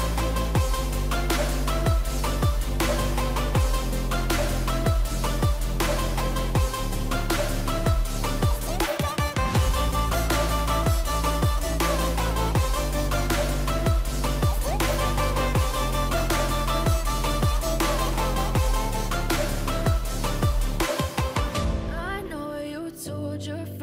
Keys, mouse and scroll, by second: 10.4 ctrl+a, 12.2 ctrl+d, 18.4 ctrl+a, 21.3 ctrl+d, 22.7 shift+click.